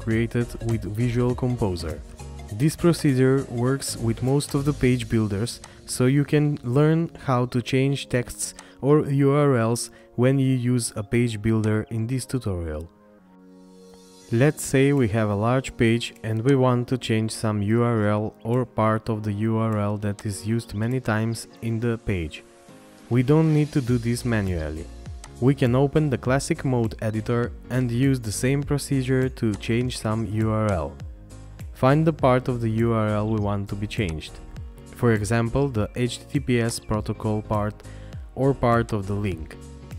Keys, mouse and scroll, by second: 6.6 scroll up 1, 10.2 scroll down 1, 31.7 scroll down 1, 37.4 scroll up 1.